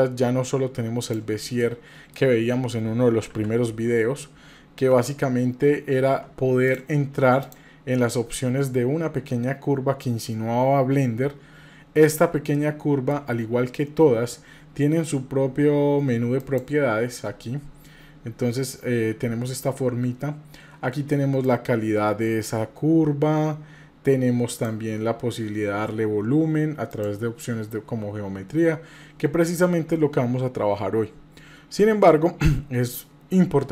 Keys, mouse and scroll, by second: 1.6-2.1 middle drag, 3.3 KP_7, 4.9 Tab, 6.1 Tab, 6.7 click, 7.4 click, 11.5-11.9 scroll up 2, 12.1-12.5 scroll up 2, 12.5-13.2 shift+middle drag, 16.4 click, 18.0-21.5 middle drag, 21.5-24.7 drag, 26.9 drag.